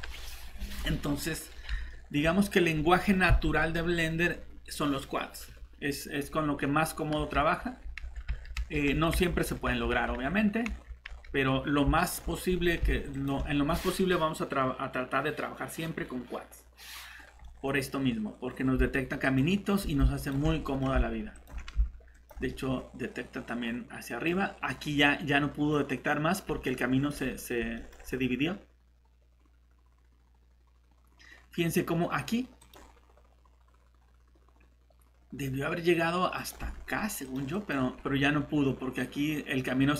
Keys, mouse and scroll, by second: 0.1-1.7 scroll down 1, 1.9 middle click, 7.1-7.8 typing, 12.0 click, 17.1 scroll down 1, 17.4 middle click, 18.5 scroll up 1, 19.2 click, 19.2-20.3 typing, 20.5 middle click, 21.3 click, 22.5 middle click, 24.3 scroll up 1, 26.6 middle click, 32.6 click.